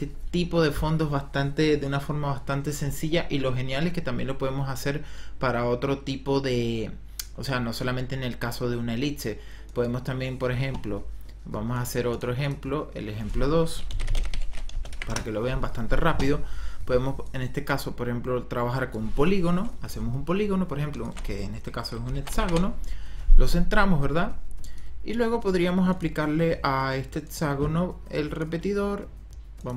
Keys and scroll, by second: 13.5-15.4 typing, 22.3 ctrl+alt+Home.